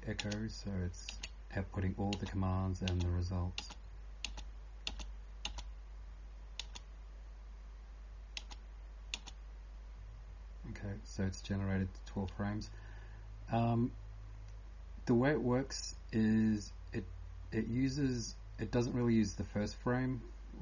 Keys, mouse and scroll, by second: 5.4 space, 9.2 space.